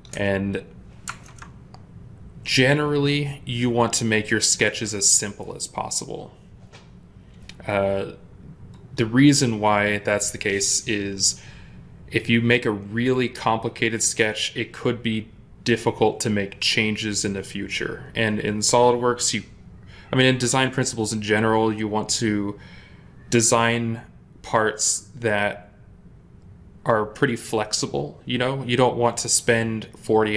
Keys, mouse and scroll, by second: 0.9 ctrl+Tab.